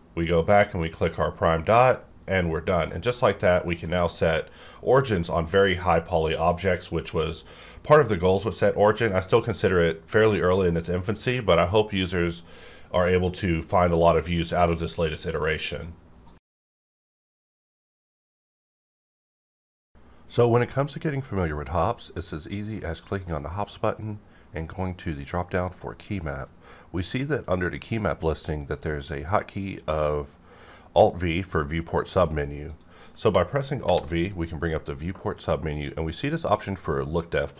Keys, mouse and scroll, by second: 0.7 click, 2.9 middle click, 3.2 scroll down 1, 3.5 shift+middle click, 25.9 click, 26.0 click, 32.7 click, 33.8 alt+v.